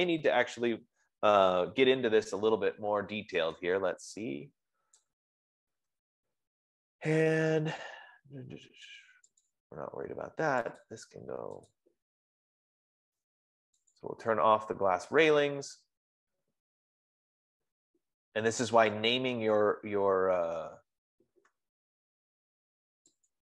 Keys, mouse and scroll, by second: 0.6 click, 5.3-7.8 drag, 9.7 click, 10.0 click, 11.3 click, 12.0 click, 14.3 click.